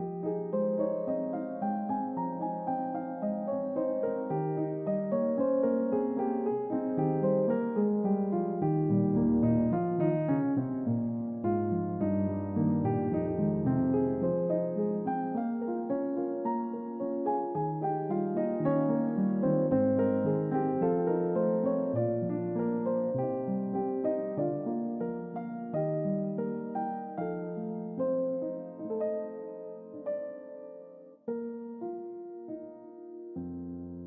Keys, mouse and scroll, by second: 0.9 click, 1.3 double click, 1.5 click, 2.4-6.7 drag, 7.9-10.8 drag, 11.8 middle click, 16.1 click, 16.9-17.6 drag, 17.8 click, 19.0 shift+a, 21.9 click, 23.1 click, 25.0 click, 25.6 click, 26.5 click, 27.7-34.0 drag.